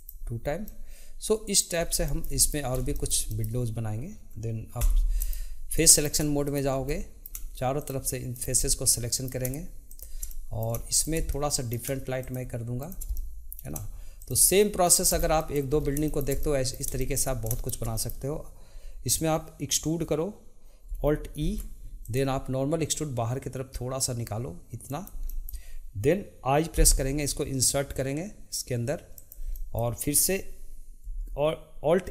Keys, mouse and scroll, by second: 0.0 click, 0.7-1.8 middle drag, 2.1 shift+middle click, 2.9-4.8 shift+middle drag, 4.8 3, 5.1 click, 5.7 middle click, 6.4 shift+click, 6.9 middle click, 7.7 shift+click, 8.3 shift+click, 8.7-9.9 middle drag, 9.9 shift+click, 10.3 middle click, 10.9 shift+click, 11.3 middle click, 12.2 shift+click, 12.8 shift+click, 13.1-14.2 middle drag, 14.2 shift+click, 14.8 shift+click, 15.1 scroll down 2, 15.4 middle click, 15.8 scroll up 2, 16.0-21.1 shift+middle drag, 21.4 alt+e, 25.2-26.7 middle drag, 29.5-32.1 middle drag.